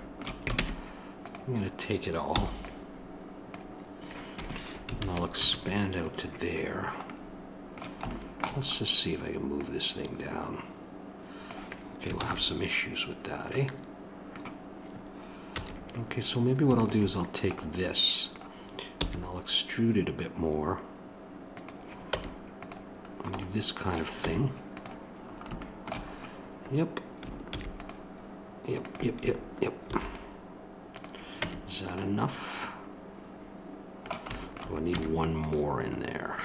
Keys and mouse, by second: 0.6 ctrl+Tab, 5.0 ctrl+KP_Add, 9.5-11.5 drag, 12.1 ctrl+z, 15.5 a, 16.7-21.5 drag, 22.1 Tab, 24.2 Tab, 27.4 ctrl+r, 29.8 ctrl+r, 31.4 Tab, 32.6 middle click.